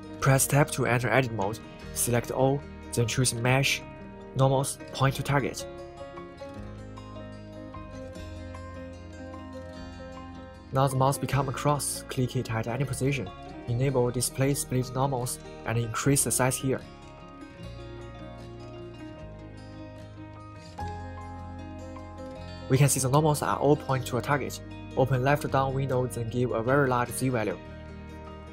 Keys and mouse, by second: 1.6 right click, 8.9 click, 16.0-20.1 drag, 20.1 right click, 27.0-28.5 drag.